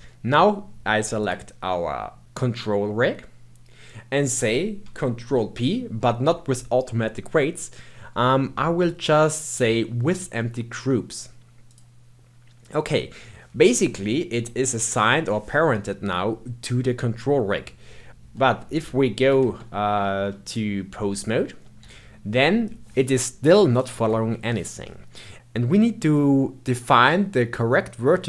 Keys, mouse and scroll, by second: 1.2 shift+click, 5.2 ctrl+p, 18.1 Tab, 18.2 Tab, 18.7 ctrl+Tab, 19.4 ctrl+Tab, 20.4 click, 21.8 g.